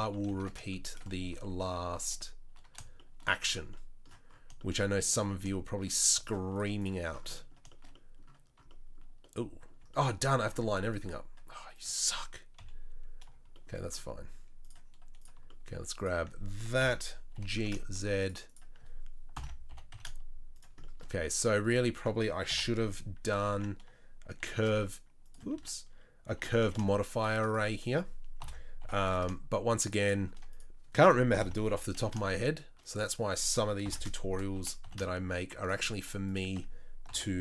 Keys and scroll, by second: 0.0-2.1 typing, 12.5 KP_3, 16.8 ctrl+l, 17.3 g, 19.3 ctrl+l, 19.7 g, 22.7 ctrl+;, 23.4 ctrl+l, 24.5 shift+d, 25.5 ctrl+z, 26.4 g, 28.4 ctrl+l, 28.8 g, 31.3 ctrl+l, 31.7 g, 33.8 ctrl+l, 34.6 g, 37.1 ctrl+l.